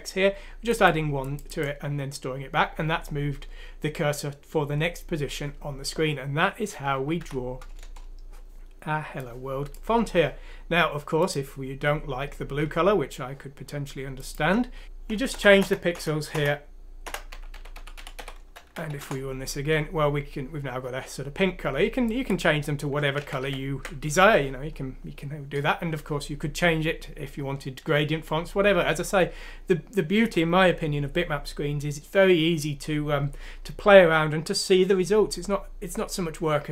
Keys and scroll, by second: 7.1 F6, 7.8 Return, 14.7 Insert, 15.3-18.1 typing, 18.8 F6, 18.9 Return, 19.5-20.4 typing, 23.3 ctrl+z.